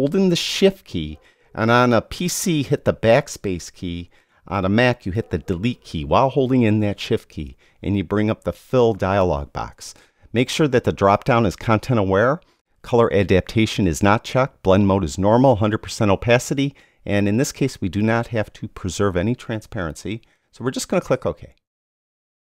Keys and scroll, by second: 7.0 shift+BackSpace.